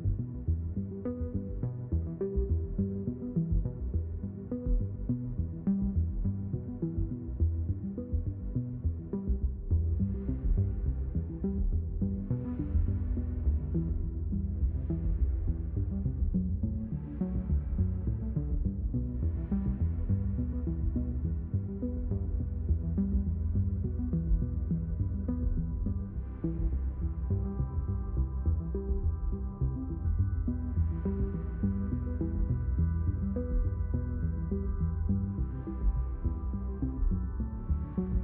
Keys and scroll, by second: 4.7 space, 7.3 ctrl+z, 8.2 space, 10.4 space, 16.1 space, 25.3 space, 29.9 ctrl+z, 37.7 d.